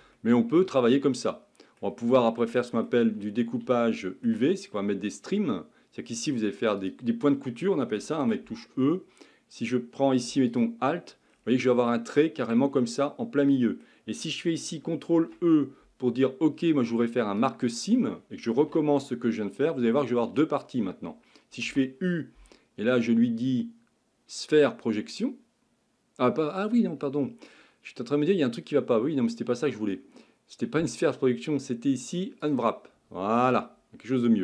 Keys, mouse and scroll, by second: 0.2-3.1 shift+middle drag, 3.1-3.8 scroll up 6, 3.8-5.1 shift+middle drag, 5.1-6.9 scroll up 3, 6.9 click, 8.2 2, 10.6 alt+click, 11.3-11.7 scroll down 3, 11.7-17.5 middle drag, 17.5 ctrl+e, 18.6 a, 18.9 a.